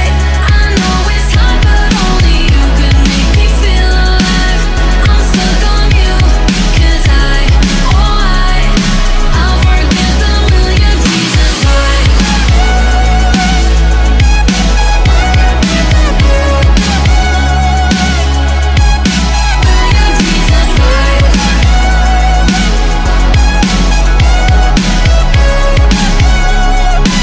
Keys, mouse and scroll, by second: 0.0-0.3 scroll up 2, 0.3-0.7 scroll down 2, 0.7 middle click, 1.7-4.6 drag, 4.6 middle click, 5.4 scroll down 1, 5.7-6.3 scroll up 1, 6.3-11.4 drag, 11.4 ctrl+z, 11.8-14.7 middle drag, 14.7-15.7 right drag, 15.7 click, 16.2 scroll down 3, 16.4-16.9 scroll up 8, 16.9-18.1 middle drag, 18.1 scroll up 4, 18.3-19.0 scroll down 11, 19.0 scroll up 1, 19.3-21.5 drag, 21.5 shift+d, 22.7 shift+middle click, 23.2 click, 26.0 middle click, 26.5 right click.